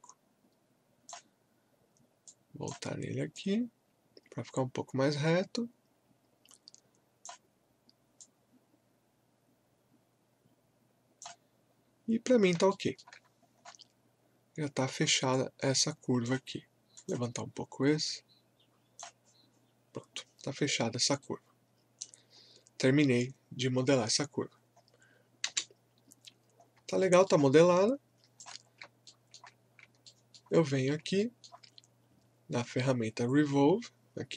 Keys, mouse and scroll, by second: 11.7 scroll down 1, 12.3 scroll up 1, 12.7 alt+middle click, 13.2 scroll up 1, 15.3-21.2 drag, 21.2 right click, 22.3 scroll down 1, 23.7-24.1 scroll up 1, 25.4 space, 26.6 scroll up 1, 27.0 alt+middle click, 27.6 click, 27.6 alt+click, 28.7 scroll up 1, 29.0 alt+middle click, 29.7 scroll down 1, 30.0 alt+middle click, 31.2 alt+middle click.